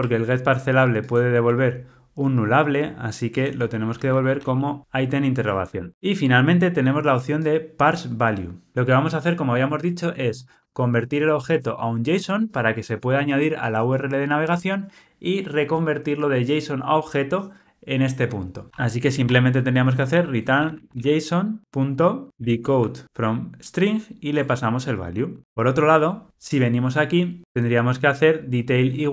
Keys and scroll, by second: 1.1 super+b, 2.5 alt+super+[, 20.2 Return, 23.0 Return, 24.3 Tab.